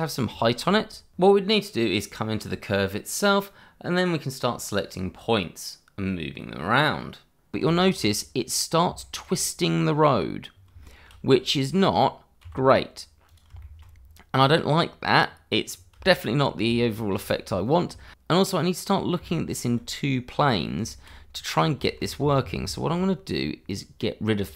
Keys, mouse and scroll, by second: 0.4 shift+middle click, 1.1 Tab, 1.8 click, 2.4 Tab, 5.1 shift+middle click, 6.2 g, 7.5 click, 8.0-8.5 scroll up 1, 9.0 shift+middle click, 10.5 scroll down 1, 10.8 shift+middle click, 11.4 click, 12.4 g, 13.2 click, 13.6 middle click, 14.3 scroll up 1, 15.2-15.7 scroll down 1, 16.0 shift+middle click, 18.0 shift+middle click, 18.4 middle click, 19.2 middle click, 19.6 scroll up 1, 19.8 shift+middle click, 20.6-20.9 scroll up 1, 21.0 shift+middle click, 21.5 middle click, 21.5 scroll down 1, 22.0 ctrl+z, 23.7 click, 24.1-24.5 scroll down 1.